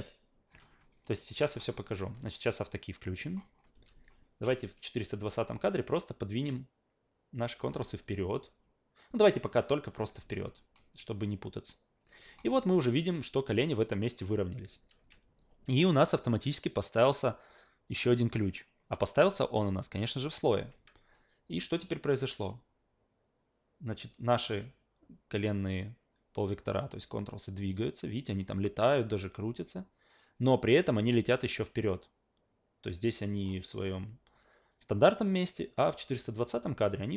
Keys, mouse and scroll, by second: 1.0 alt+middle click, 1.3 alt+right click, 1.6 alt+middle click, 3.4 alt+middle click, 3.7 w, 5.8-7.7 drag, 7.9-9.9 alt+drag, 10.2 a, 12.1 alt+right drag, 12.3 alt+middle click, 13.8 alt+click, 14.9 a, 17.9 click, 18.3 click, 18.6 alt+middle click, 20.6 alt+middle click, 20.7 a, 22.2-33.4 drag, 34.7-37.1 drag.